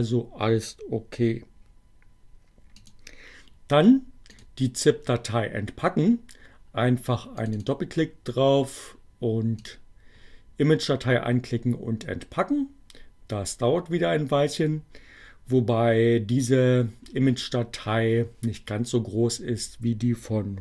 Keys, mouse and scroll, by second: 2.2-4.6 drag, 7.3 click, 9.5 click.